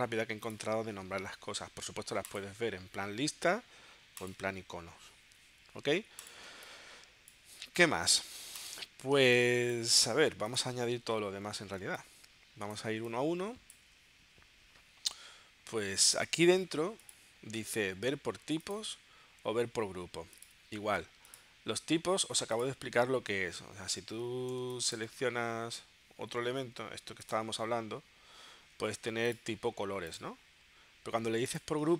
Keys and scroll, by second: 6.5 space, 9.2 space, 11.9 space, 24.6 space.